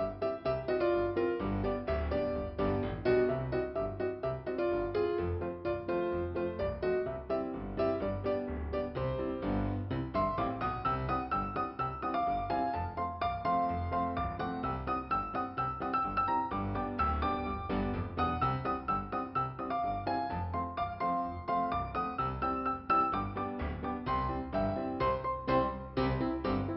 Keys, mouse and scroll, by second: 0.0 scroll down 1, 1.4 scroll up 2, 2.7 click, 3.1 click, 3.3 double click, 4.9 click, 5.9 click, 8.8 scroll down 2, 13.4 scroll up 2, 16.1 click, 16.9 click, 17.6 scroll down 1, 20.0 click, 20.3 click, 21.3 click, 24.7 click, 25.6 click.